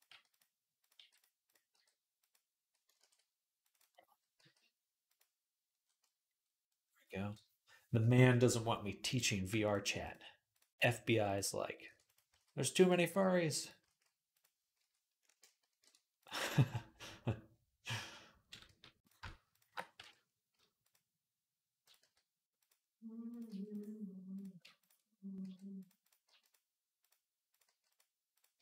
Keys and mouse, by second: 0.6 click, 0.8 g, 1.2 click, 1.5 g, 2.8 ctrl+r, 4.3-8.9 middle drag, 4.3 g, 8.9 click, 9.0-21.6 ctrl+middle drag, 9.4 ctrl+click, 10.3 ctrl+click, 11.1 ctrl+click, 11.7-15.5 typing, 18.5 g, 19.3 shift+click, 19.8 m, 21.6 click, 21.7-23.1 middle drag, 21.8 g, 23.1 click, 23.2-24.6 middle drag, 23.3 g, 24.6 ctrl+click, 24.7-28.6 middle drag, 25.2 g, 26.1 g, 26.8 click, 27.5 g, 28.1 click.